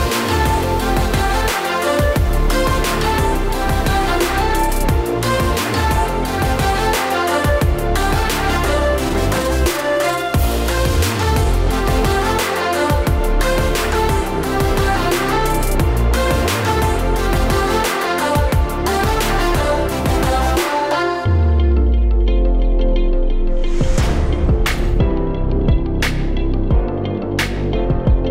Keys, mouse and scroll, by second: 4.5 click, 5.1 click, 8.0 s, 10.9 click, 16.8 click, 17.1 right click, 18.0-18.6 scroll down 5, 18.6-19.5 scroll up 12, 19.5 click, 20.6 click, 26.7 click.